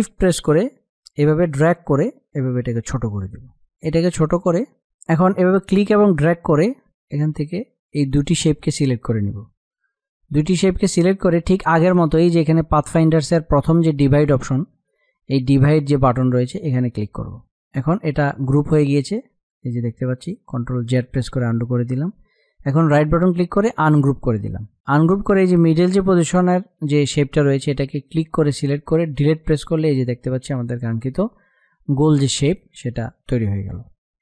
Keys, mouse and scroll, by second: 7.1-10.7 drag, 17.1-21.1 drag, 21.1 ctrl+z, 23.1 right click, 24.2 right click, 24.4 click, 28.3 click, 29.3 Delete.